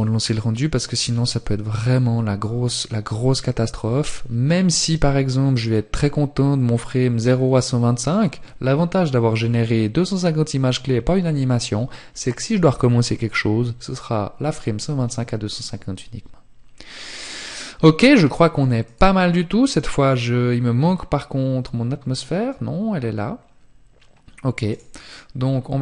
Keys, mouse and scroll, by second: 17.1 click, 25.5-25.8 scroll down 4.